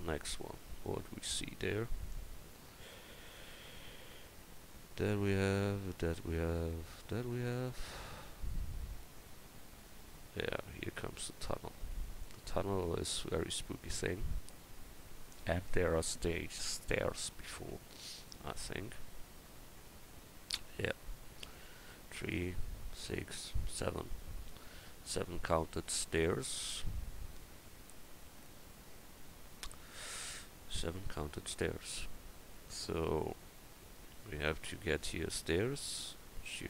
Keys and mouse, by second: 33.1 middle click.